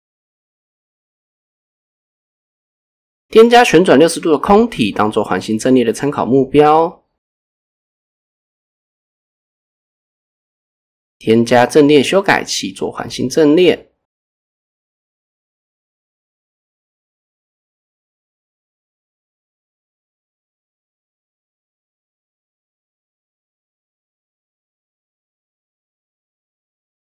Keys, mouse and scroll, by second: 1.6 r, 1.9 click, 2.5-3.6 drag, 4.5 click, 7.6 click, 8.7-11.9 drag, 12.5-13.0 drag, 14.0 click, 14.7 click, 15.1 click, 15.6 click, 18.3-18.7 scroll down 2, 18.9 click, 19.2 click, 20.0 click, 20.3 click, 20.9 click, 21.9 click, 22.2 click, 22.5 click, 23.0 click, 23.4 click, 24.6 click, 25.5 Tab, 25.8 scroll up 1, 26.1 shift+middle drag, 26.5-27.0 scroll up 1.